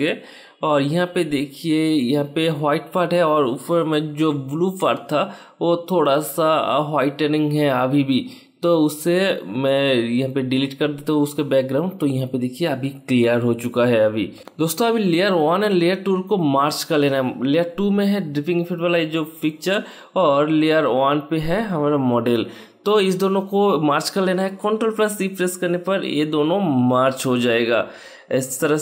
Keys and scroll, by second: 10.3 Delete, 12.1 ctrl+d, 23.6 ctrl+e.